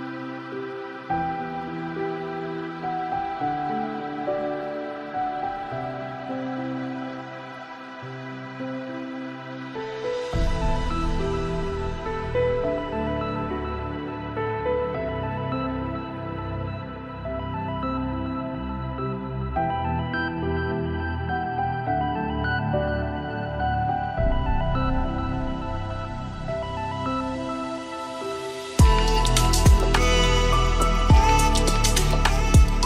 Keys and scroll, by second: 26.6 ctrl+space.